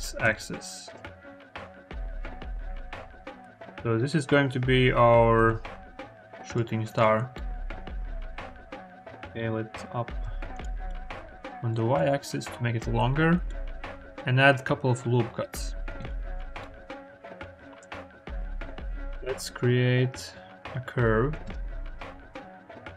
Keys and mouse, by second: 0.0 9, 0.1 0, 0.7 Return, 1.8 click, 2.8 s, 3.0 0, 3.3 ., 5.2 0, 5.7 1, 6.3 click, 7.2 click, 7.7 ctrl+r, 7.7-10.1 typing, 10.4 click, 10.7-11.8 drag, 13.7 ctrl+r, 16.5 click, 17.5 Tab, 17.9 KP_1, 19.0 shift+a.